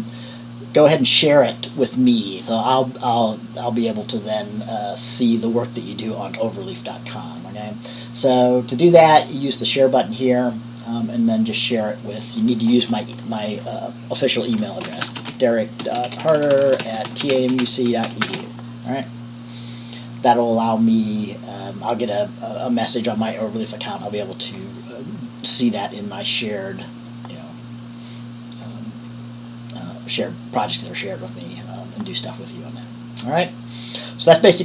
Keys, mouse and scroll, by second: 10.4 click, 10.6 click, 12.0-13.0 drag, 15.1-18.5 typing, 20.2 click, 27.2 click, 30.1-34.6 drag.